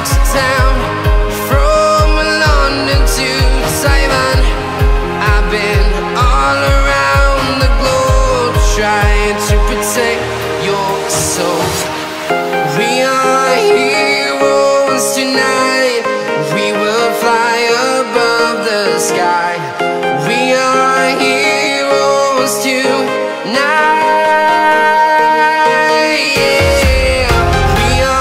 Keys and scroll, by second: 6.6 space, 10.9 space, 11.4 alt+super+space, 11.5 alt+super+space, 11.6 alt+super+space, 11.7 alt+super+space, 11.8-12.4 alt+super+space, 15.7 space, 16.2 super+space, 16.3 super+space, 16.4 super+space, 16.5 super+space, 18.8 Delete, 20.1 space, 20.6 super+z, 22.7 Delete, 23.4 space, 23.9 alt+super+space, 24.0 alt+super+space, 24.1 alt+super+space, 24.2 alt+super+space, 24.3 alt+super+space, 24.5 alt+super+space, 24.6-25.1 alt+super+space, 25.5 alt+super+space, 25.6 alt+super+space, 25.7 alt+super+space, 25.8 alt+super+space, 26.0 alt+super+space, 26.4 alt+super+space.